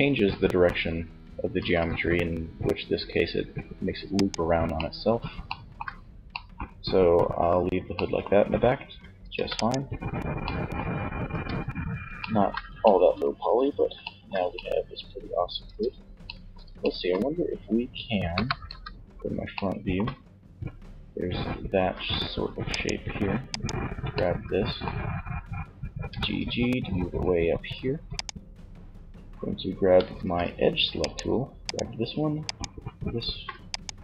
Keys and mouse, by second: 0.7 ctrl+r, 3.3 right click, 8.4 ctrl+s, 10.4 Tab, 14.7 Tab, 17.3 KP_1, 17.7 z, 21.2 z, 24.9 g, 29.4 ctrl+Tab.